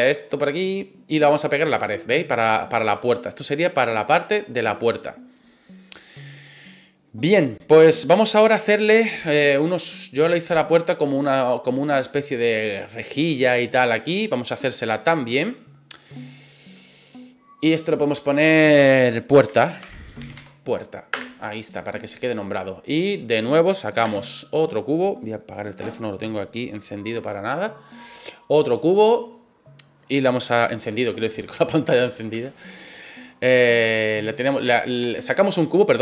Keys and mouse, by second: 0.0 middle click, 1.2-4.9 middle drag, 10.1 middle click, 17.8 click, 18.0-22.0 drag, 23.1 click, 24.0 shift+a, 32.3 s, 34.2 click, 35.3 ctrl+z.